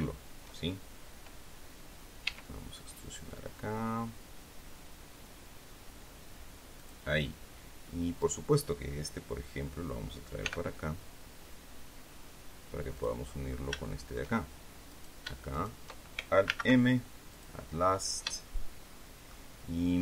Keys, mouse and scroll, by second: 2.1 e, 6.6 click, 8.1 right click, 10.3 g, 12.8 click, 13.2-13.6 scroll up 1, 13.7 shift+click, 14.8 right click, 15.4 shift+right click, 16.3 alt+m, 17.2 click, 17.8 scroll down 2, 18.2-19.3 shift+middle drag.